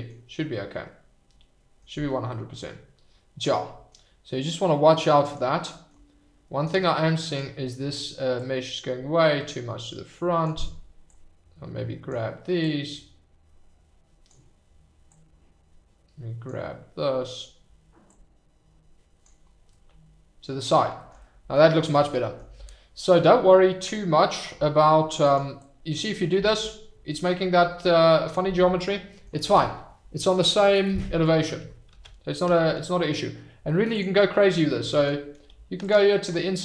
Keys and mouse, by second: 0.5 middle click, 1.2 click, 2.3 click, 3.1 middle click, 3.4 click, 5.2 click, 6.7 f, 8.8-10.8 drag, 11.1-12.2 drag, 12.8-14.2 drag, 15.3-16.4 drag, 18.4 click, 19.7-20.7 middle drag, 21.2 middle click, 22.2 middle click, 24.5 f, 25.7-28.5 drag, 28.7 middle click, 32.1 ctrl+z, 35.4 f.